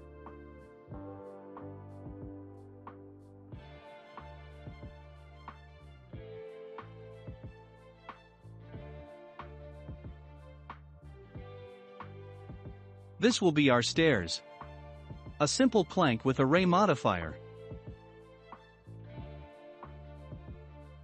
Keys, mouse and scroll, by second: 1.5 click, 2.3 click, 4.0 click, 4.8 click, 5.9-6.4 drag, 6.4 scroll down 3, 7.2-8.6 middle drag, 7.2 scroll down 1, 8.6-9.1 drag, 9.1-9.6 middle drag, 9.6 scroll up 1, 10.1-10.5 scroll up 1, 11.3 shift+d, 15.6-16.0 scroll up 2, 16.0-18.5 shift+middle drag, 18.5 s.